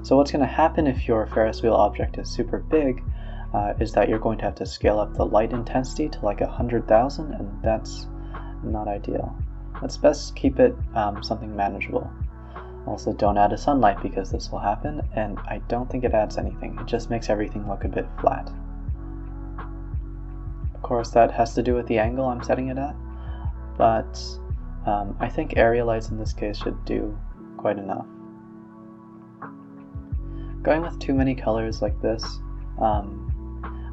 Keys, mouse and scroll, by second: 0.3 click, 2.0-3.7 drag, 4.1 click, 6.5-6.9 scroll down 3, 7.2 a, 7.3 a, 7.8 middle click, 8.2 scroll down 3, 8.6 middle click, 8.8 z, 9.8 click, 10.6 shift+d, 11.0 click, 11.6 KP_0, 11.7 z, 12.9 click, 15.2-16.9 drag, 19.5 click, 20.2 click, 21.6 click, 23.3-24.8 drag, 25.8-26.3 scroll down 3, 26.6 drag, 30.4 click, 31.2 click, 31.8-33.6 drag.